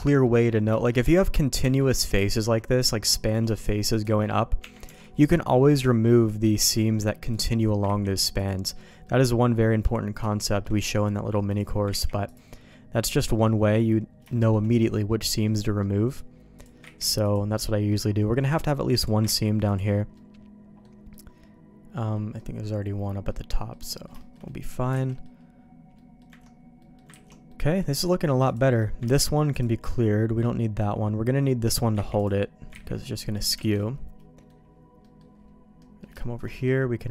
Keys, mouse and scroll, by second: 0.2 middle click, 0.7 shift+middle click, 1.1 alt+a, 1.6 Tab, 2.3 alt+click, 3.2 click, 3.6 shift+click, 4.6 Tab, 4.9 alt+a, 6.6 b, 7.8 ctrl+e, 9.0 middle click, 10.3 middle click, 10.9 middle click, 11.9 ctrl+e, 13.0 middle click, 14.3 shift+middle click, 14.9 middle click, 15.8 middle click, 16.5 click, 16.8 ctrl+e, 17.9 middle click, 18.5 middle click, 19.0 click, 19.2 ctrl+e, 20.1 middle click, 21.1 middle click, 22.4 middle click, 23.0 middle click, 23.5 middle click, 23.9 middle click, 24.2 shift+middle click, 24.4 middle click, 25.0 alt+a, 25.1 middle click, 25.9 middle click, 26.8 middle click, 27.1 ctrl+s, 27.5 middle click, 28.4 click, 28.7 middle click, 29.0 ctrl+e, 31.7 click, 32.2 ctrl+e, 32.9 ctrl+z, 33.0 middle click, 33.7 alt+a, 33.8 middle click, 35.0 middle click, 35.8 middle click, 36.2 middle click, 36.5 middle click.